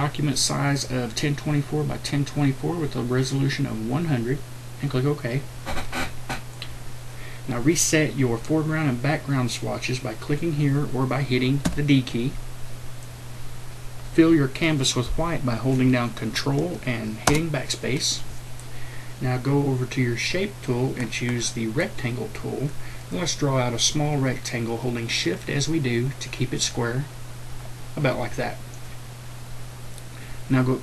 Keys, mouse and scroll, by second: 11.6 d, 17.2 ctrl+BackSpace, 20.3-30.8 drag.